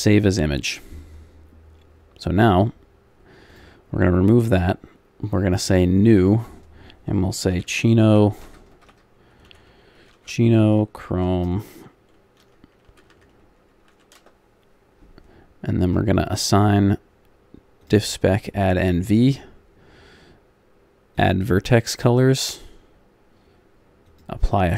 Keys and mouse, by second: 0.0-8.7 drag, 8.7 BackSpace, 15.8-24.7 drag.